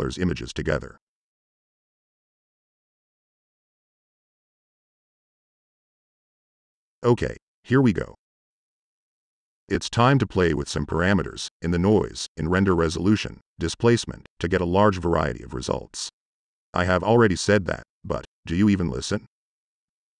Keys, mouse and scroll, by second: 0.6 ctrl+Tab, 3.9 click, 14.1 click, 14.4-15.6 drag, 15.8-16.5 drag, 16.7 click, 17.1-17.8 drag, 18.0 click, 19.3 click, 19.8 click.